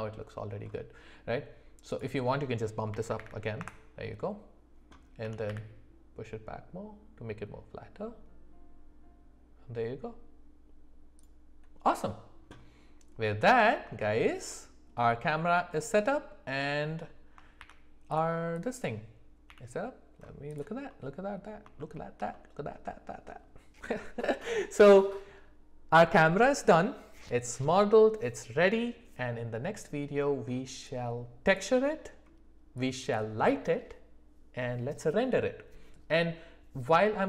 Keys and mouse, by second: 1.9-4.0 drag, 5.2 g, 13.2 middle click, 14.0-14.3 shift+middle drag, 14.5-17.0 middle drag, 17.6 shift+c, 18.7 click, 19.5 f, 20.9-21.5 middle drag, 21.8 shift+middle click, 22.3 middle click.